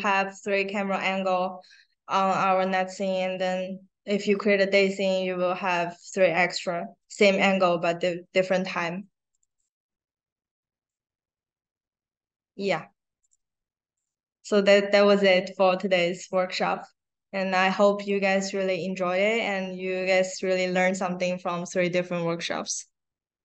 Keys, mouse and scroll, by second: 2.5 click, 5.9 click, 7.0 click, 8.3 click, 9.2 click, 9.4 click, 10.7 click, 11.3 click, 13.1 click, 13.9 click, 17.9 click, 20.0 middle click, 20.0 scroll down 1.